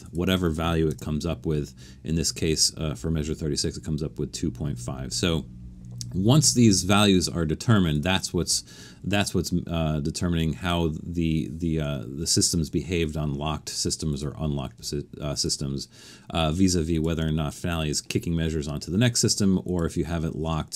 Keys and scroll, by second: 0.9 Return.